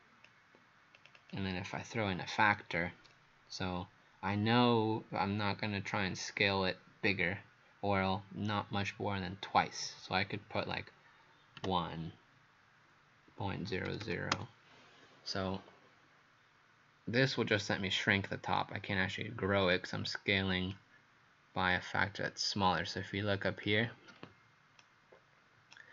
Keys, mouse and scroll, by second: 1.2 click, 11.6 typing, 13.6-14.4 typing, 17.3 click, 24.8 right click.